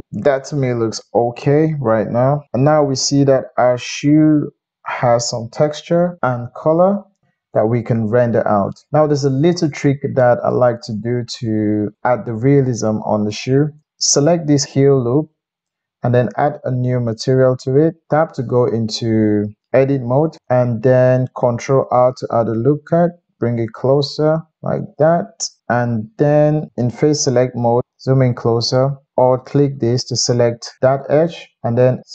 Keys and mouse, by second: 0.0-13.5 middle drag, 17.2 click, 18.0 Tab, 18.8 click, 19.9-21.7 drag, 21.8 ctrl+r, 23.7-25.6 drag, 25.6-29.1 middle drag, 26.7 3, 29.3 alt+click, 31.7 middle click, 32.0-32.1 drag.